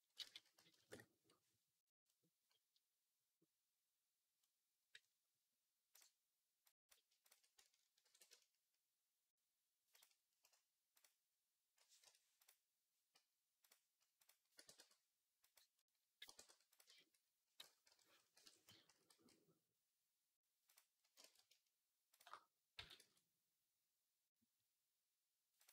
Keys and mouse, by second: 0.2 s, 7.9 ctrl+b, 10.9-12.3 drag, 13.4 click, 14.4 g, 15.6-18.3 middle drag, 16.1 g, 18.7 s, 21.1 ctrl+z, 22.1-25.7 drag, 22.6 s.